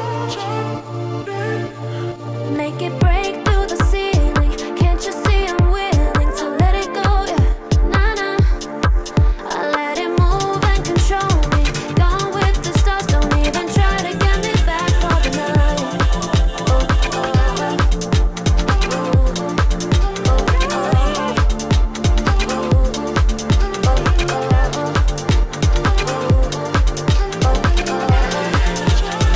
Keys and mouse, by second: 0.0 Tab, 0.8 click, 2.1 shift+click, 2.8 click, 3.1-6.6 middle drag, 6.6 click, 7.3 click, 8.7 alt+middle click, 9.4 click, 10.6 alt+middle click, 11.2 Tab, 12.8 ctrl+b, 15.8 1, 16.1 click, 16.8 shift+click, 17.4 click, 17.9 g, 19.1 click, 19.3 g, 21.1 k, 24.9 click, 25.4 middle click, 26.3 click, 27.8 click, 28.2 click, 28.5 Tab, 29.1 middle click.